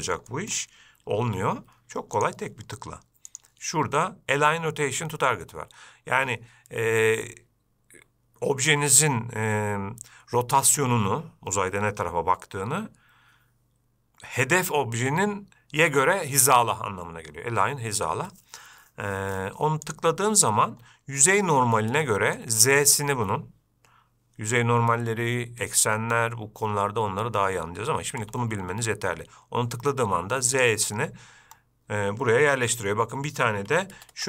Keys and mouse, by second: 0.5 middle click, 1.5 g, 3.5-20.6 drag, 22.3-22.6 shift+middle drag, 28.4 g, 32.8 g.